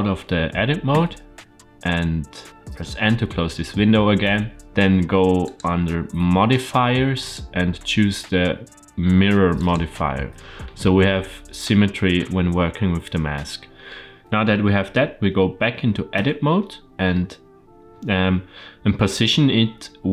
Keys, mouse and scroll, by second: 0.8 Tab, 4.1 n, 5.3 click, 7.0-9.6 drag, 13.8 middle click, 16.0 Tab, 16.9-17.4 middle drag.